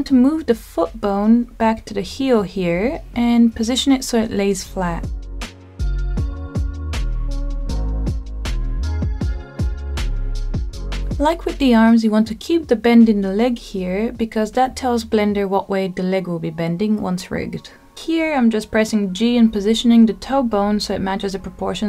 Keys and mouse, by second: 0.5 y, 2.9 click, 3.3-4.3 middle drag, 5.3 g, 6.1 z, 8.3 click, 8.9 g, 9.1 y, 10.4 click, 13.1 click, 15.1 g, 15.4 y, 17.4 click, 18.0 click, 20.4 middle click, 21.7 middle click.